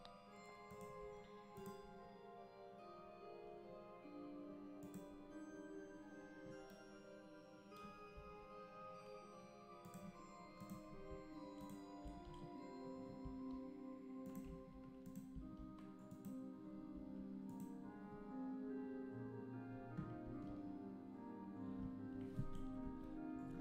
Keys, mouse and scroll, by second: 0.7-2.0 shift+right drag, 2.3-6.0 drag, 8.8 g, 10.6 click, 11.6 shift+right click, 12.1 shift+s, 13.3 s, 14.5 g, 15.4 s, 17.0 g.